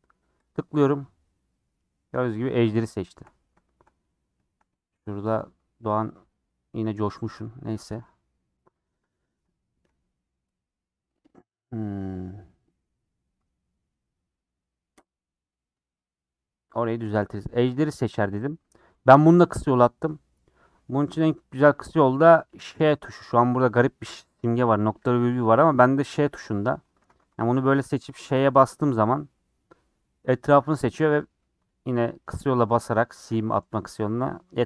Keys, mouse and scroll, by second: 1.0-2.1 middle drag, 2.1-2.5 scroll up 4, 3.0 shift+middle click, 4.0-4.4 scroll up 3, 4.8-6.0 shift+middle drag, 6.0 alt+z, 7.3 alt+z, 7.5 scroll down 3, 7.8 middle click, 8.2 scroll down 4, 8.3-9.5 middle drag, 9.5 scroll up 4, 10.5-16.7 middle drag, 17.0 scroll down 3, 17.2-18.8 middle drag, 18.8-20.3 scroll up 1, 27.4 alt+Left, 28.3 ;, 29.7-33.7 middle drag, 34.1 middle click.